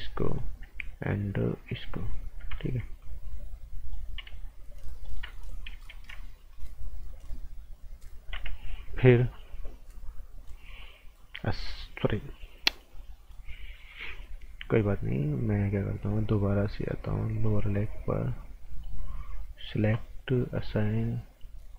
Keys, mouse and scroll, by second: 1.8 shift+click, 3.0 shift+click, 4.8 click, 6.5 click, 11.4 click, 17.3 click, 18.6 right click, 20.5 click.